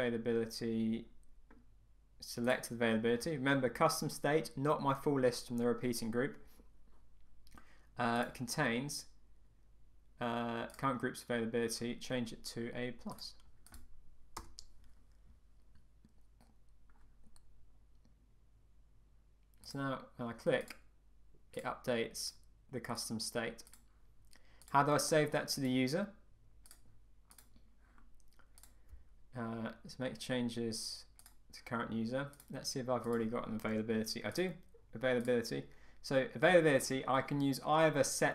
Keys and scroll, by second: 14.4 Return.